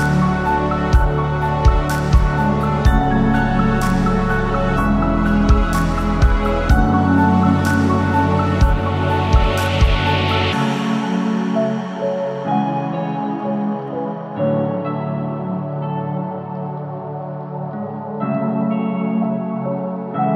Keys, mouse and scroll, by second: 2.1 middle click, 2.6 shift+middle click, 3.1-3.6 scroll up 1, 3.6 middle click, 4.4 shift+middle click, 5.3 ctrl+r, 7.4 ctrl+b, 9.1-9.5 scroll down 4, 9.5 a, 9.9 g, 10.7 middle click, 11.0-12.0 scroll up 2, 12.0 click, 12.4 alt+click, 12.8 scroll up 1, 12.9 g, 14.4 alt+click, 14.9 g, 17.1 ctrl+r, 17.9 middle click, 19.4 a, 19.6 middle click, 19.9 g.